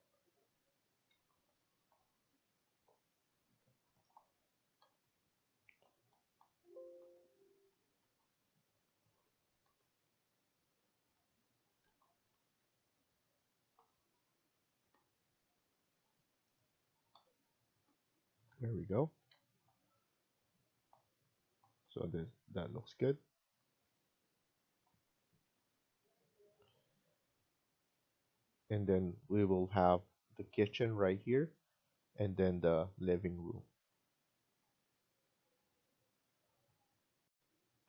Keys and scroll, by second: 0.8 Escape, 1.0 Escape, 4.7 Right, 6.3 Right, 7.0 Left, 7.6 Escape, 8.0 Escape, 9.6 Right, 10.2 Right, 11.5 Escape, 11.7 Escape, 13.6 Right, 14.7 Right, 15.3 Escape, 17.0 Right, 17.6 Right, 18.4 Right, 19.0 Escape, 19.2 Escape.